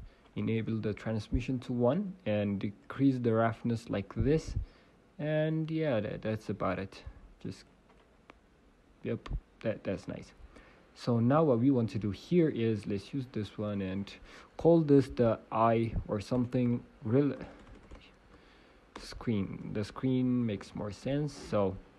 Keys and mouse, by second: 0.4 shift+a, 2.2 middle click, 4.8-7.4 middle drag, 8.1 click, 9.8-11.4 middle drag, 13.0-21.9 drag, 21.0 e.